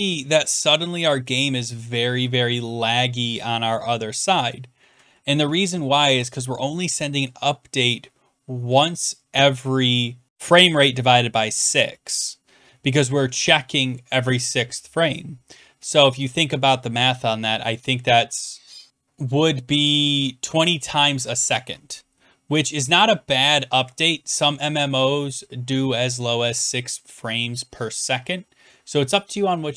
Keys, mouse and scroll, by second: 0.3-1.9 Down, 2.0 Left, 2.4 Up, 2.4 Right, 4.9 Up, 5.1-6.1 Down, 6.8-7.2 Up, 7.4-8.6 Down, 9.4-9.8 Up, 22.1-22.5 scroll down 1, 22.7 click, 22.8-23.7 scroll down 14, 24.3 scroll up 3, 24.4 Down, 24.4 Up, 24.4-27.6 drag, 28.6-29.2 Down.